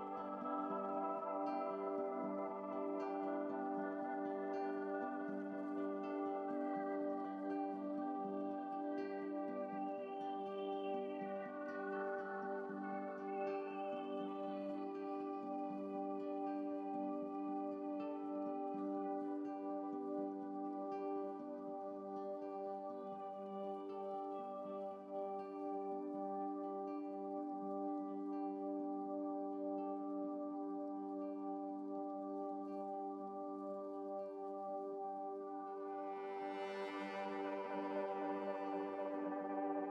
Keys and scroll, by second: 6.6 x, 10.4 ctrl+z, 18.4 x, 25.5 x, 30.1 x, 30.7 x, 32.0 x, 32.7 x, 36.9 ctrl+z.